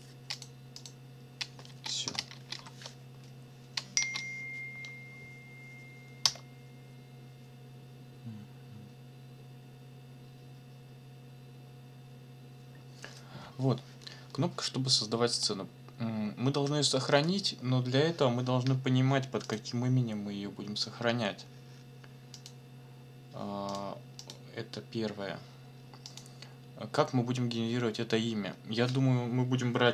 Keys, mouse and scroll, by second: 0.3 click, 0.8 click, 1.7 space, 2.0 -, 2.3 space, 2.5 Delete, 4.0 space, 6.3 Return, 15.3 click, 19.4 click, 22.3 click, 23.7 click, 24.2 click, 26.2 click.